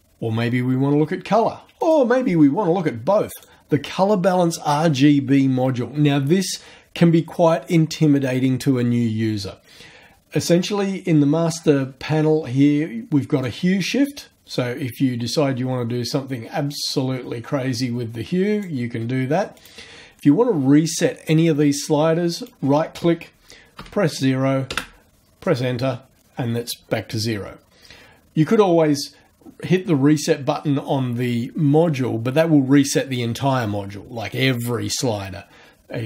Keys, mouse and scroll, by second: 1.8 click, 3.3 click, 13.4-18.8 drag, 19.5 right click, 22.3 right click, 23.8 KP_0, 24.7 KP_Enter.